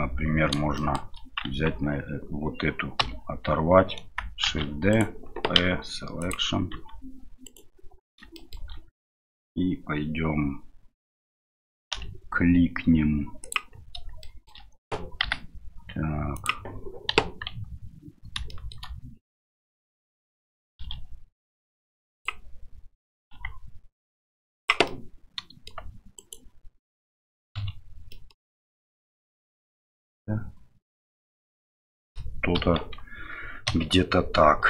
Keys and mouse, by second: 0.7 shift+middle click, 1.5 Tab, 3.0 l, 4.4 shift+d, 6.7 Tab, 7.4 right click, 8.3 shift+middle drag, 11.9 w, 14.2-14.5 middle drag, 15.2 g, 17.1 KP_1, 18.5 middle click, 24.9-25.7 middle drag, 26.2 right click, 27.6 KP_Divide, 28.1 middle drag, 29.5-31.3 middle drag, 31.3-32.1 drag, 32.5 KP_1, 33.7 KP_Divide.